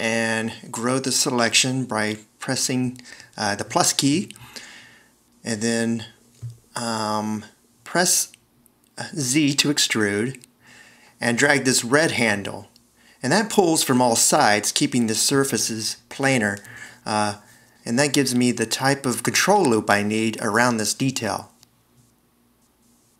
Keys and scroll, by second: 0.7 =, 9.5 z, 20.7 shift+super+a, 23.0 c.